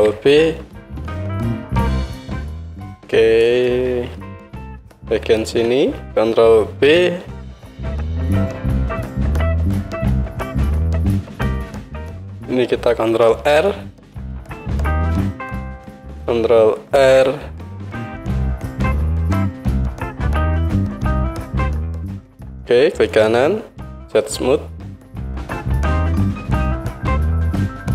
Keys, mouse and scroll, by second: 2.8-5.5 drag, 4.2 KP_1, 5.5-9.5 alt+middle drag, 6.8 ctrl+b, 9.5-15.8 drag, 13.4 ctrl+r, 15.8-22.4 middle drag, 17.0 ctrl+r, 22.0 Tab, 22.4 right click, 23.4-27.9 right drag, 23.4 Tab, 25.4 Tab, 27.0 Tab, 27.7 KP_1.